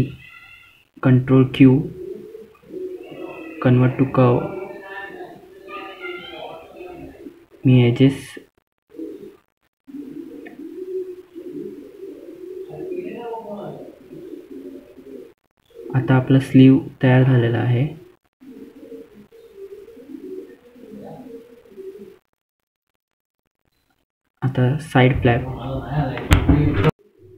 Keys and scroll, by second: 4.9 ctrl+q, 14.6 F3, 15.4 typing, 20.3 F3, 23.8 ctrl+z, 24.8 F2.